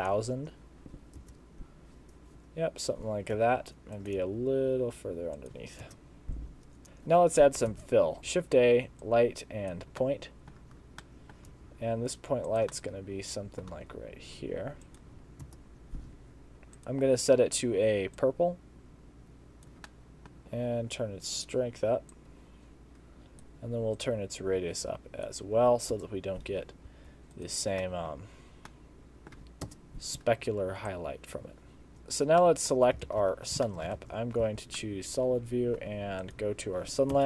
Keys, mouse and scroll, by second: 1.2 KP_0, 2.4 KP_0, 3.4 r, 4.2 g, 5.9 KP_0, 6.8 r, 7.7 shift+a, 8.2 shift+a, 10.0 middle click, 10.6-11.2 scroll down 7, 11.0 middle click, 11.6 g, 12.8 middle click, 13.8 g, 15.1 Right, 15.4 KP_0, 16.8 click, 19.9 middle click, 20.4 g, 20.4 click, 22.1 click, 24.0 click, 26.0 KP_0, 26.9 g, 27.9 middle click, 28.1-28.6 scroll down 7, 28.7 middle click, 29.7 KP_0, 30.9 click, 31.9 shift+middle click, 32.2 scroll up 2, 32.4 middle click, 32.9 scroll down 1, 33.1 alt+shift+z, 33.4 scroll down 3, 33.7 shift+middle click, 34.0 alt+shift+z, 34.2 scroll up 2, 34.8 middle click, 36.2 click, 37.2 KP_0.